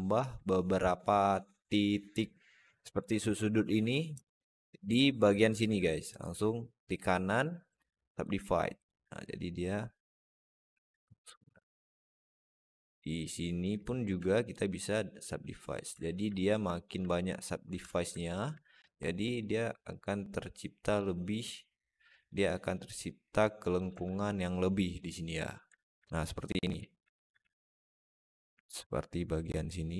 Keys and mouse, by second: 2.7 click, 8.1-9.7 drag, 10.2 click, 13.1 click, 16.2-16.8 alt+middle drag, 17.5 Tab, 18.0 alt+middle click, 19.7-20.8 drag, 22.6 click, 22.8 click, 27.2 alt+z.